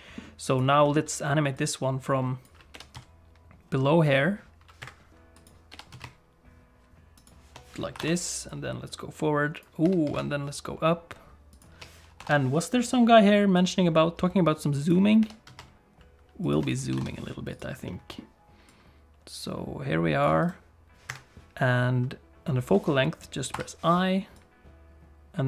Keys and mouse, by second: 0.6 click, 0.8 middle click, 1.6 click, 2.7 g, 5.5 click, 5.7 g, 7.9 i, 8.5-9.7 drag, 9.8 g, 12.2 i, 13.6-15.0 drag, 15.2 g, 16.9 i, 17.6 click, 17.9 middle click, 18.7-20.3 drag, 20.5 right click, 24.4-25.4 drag.